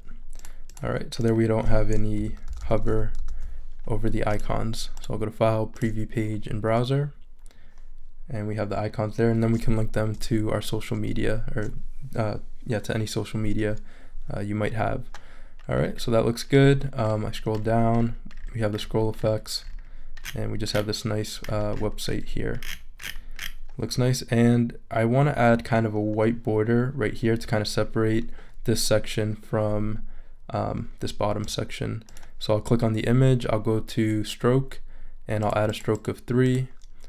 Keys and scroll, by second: 2.2 super+-.